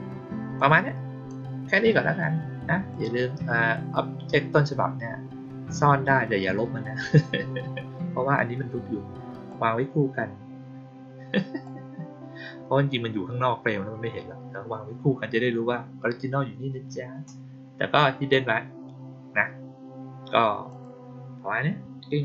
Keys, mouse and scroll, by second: 0.5-1.2 drag, 2.8 click, 9.4-11.5 drag, 20.6 click.